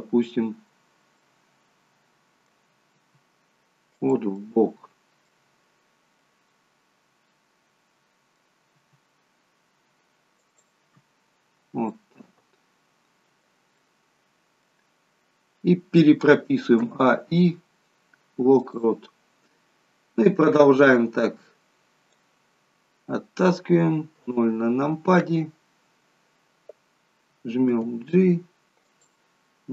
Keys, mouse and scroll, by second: 1.6 middle click, 3.1 r, 4.4 middle click, 5.6-6.0 scroll up 4, 6.3 middle click, 8.9 r, 11.3-11.8 scroll down 3, 12.0 middle click, 13.9 middle click, 16.5 a, 18.9 a, 18.9 i, 20.3 click, 22.7-23.6 scroll down 12, 24.2 KP_0, 27.9 g.